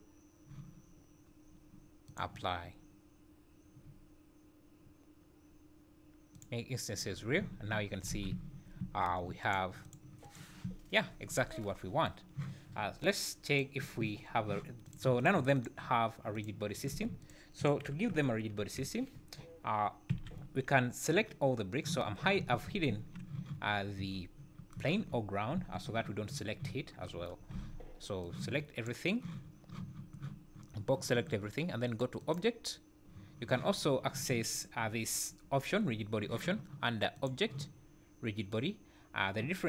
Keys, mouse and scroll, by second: 7.4 `, 7.7 `, 8.1 alt+a, 8.3 `, 8.8 `, 9.4 click, 9.8 click, 10.2 click, 10.7 `, 13.5 click, 14.9 click, 15.2 click, 15.6 click, 16.3 click, 16.8 click, 17.2 click, 17.6 click, 18.6 KP_7, 20.1 h, 22.9 `, 23.6-24.1 scroll down 4, 24.1-24.7 scroll up 3, 25.6 `, 27.5 b, 32.2 click, 37.1 click.